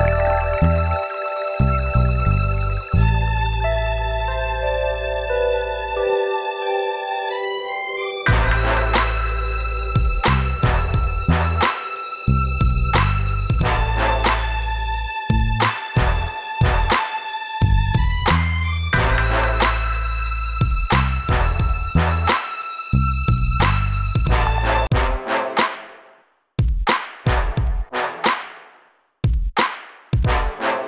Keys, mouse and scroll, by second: 0.9 click, 2.4 right click, 3.5 click, 7.9 click, 8.4 click, 8.5 click, 9.2 click, 9.3 click, 10.9 click, 11.6 click, 13.8 shift+Return, 14.7 click, 16.2 click, 18.5 click, 19.0 middle click, 20.5 click, 23.3 scroll up 2, 24.9 click, 26.5 scroll down 3, 27.6 click, 27.7 click, 28.7 click, 28.7 click, 29.1 click, 29.2 click, 29.8 click.